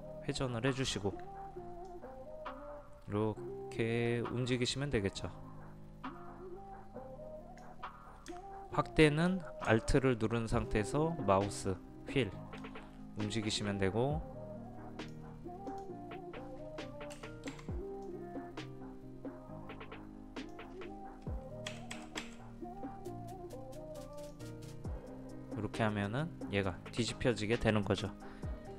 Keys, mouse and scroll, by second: 1.8-8.0 drag, 10.6 alt+scroll up 1, 11.5 alt+scroll up 1, 13.2-15.7 drag, 17.5 space, 18.0-21.0 drag, 21.7 Down, 21.9 Down, 22.2 Down, 24.1 click.